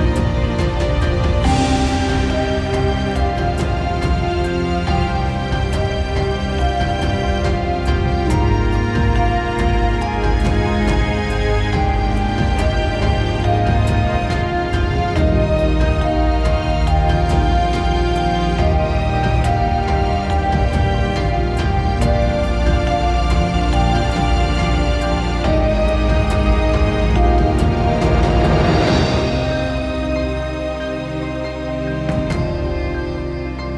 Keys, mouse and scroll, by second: 2.0 ctrl+z, 11.3 ctrl+z.